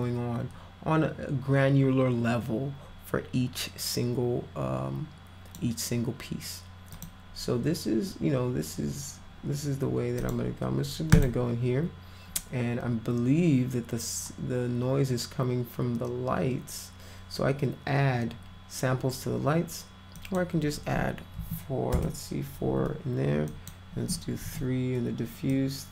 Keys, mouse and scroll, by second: 6.9 click, 10.2 click, 11.2 click, 20.2 click, 21.4 4, 21.9 Return, 23.5 click, 24.4 3, 25.5 click.